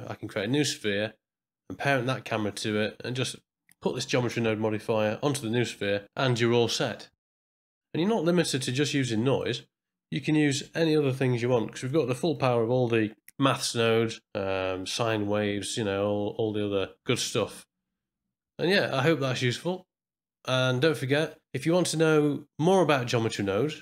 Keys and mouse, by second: 8.3-9.5 drag, 12.0 middle drag, 12.3 click, 17.3 middle click.